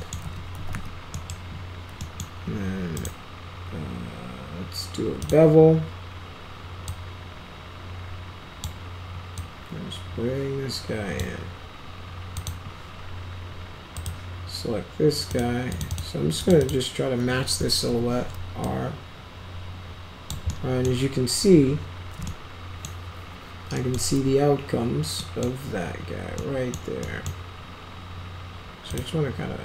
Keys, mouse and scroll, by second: 0.2-1.2 typing, 1.1 middle drag, 1.9 middle drag, 2.9 right click, 5.2 click, 6.8-8.6 drag, 9.3-11.1 drag, 12.3 click, 13.9 click, 15.2 click, 15.7 click, 15.8 click, 16.4 click, 16.6 click, 17.8 r, 18.6-20.2 drag, 20.4-20.8 middle drag, 22.2 middle click, 23.7 middle click, 25.1 middle click, 26.3 middle click, 27.0 middle drag, 28.8 click.